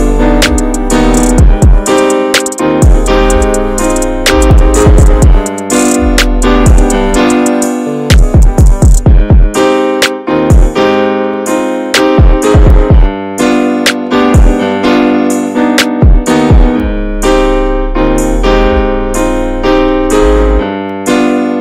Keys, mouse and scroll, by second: 0.0-1.1 scroll down 7, 1.1 click, 1.2-1.9 middle drag, 1.9-2.7 scroll up 1, 2.7 click, 3.2 click, 3.9 click, 5.9-7.7 drag, 7.7 shift+middle drag, 8.2 shift+middle drag, 8.5 scroll up 1, 8.6 drag, 12.6-21.6 drag.